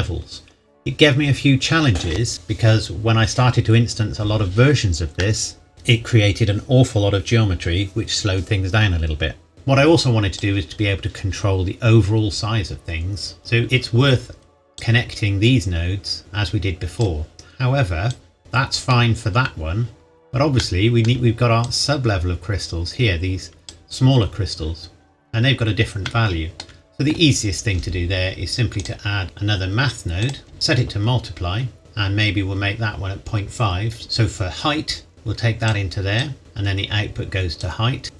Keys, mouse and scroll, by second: 5.1 middle click, 9.5 click, 12.5-13.6 scroll up 1, 13.6-14.8 scroll down 1, 14.8 click, 18.4 middle click, 19.9-20.5 scroll down 1, 20.5 shift+middle click, 21.6 click, 25.0-25.6 scroll up 1, 26.0 shift+middle click, 28.8 click, 30.2 click, 31.1-31.8 scroll down 1, 31.8 click, 35.1 click.